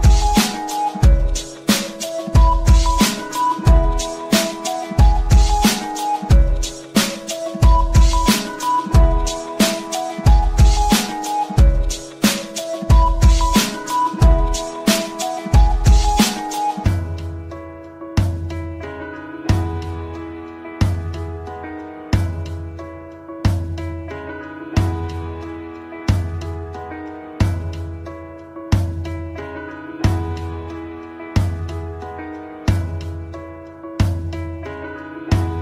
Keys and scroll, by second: 5.8 d, 8.0 f, 27.3 F3, 33.1 shift+F2, 33.4 Escape.